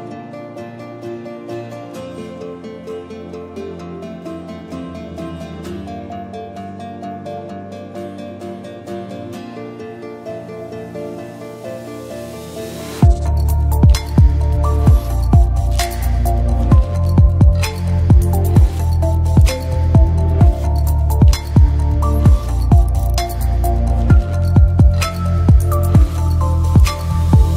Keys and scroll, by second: 5.7 space, 7.1-8.0 typing, 11.1-12.0 typing, 20.1 BackSpace, 21.2-22.1 typing.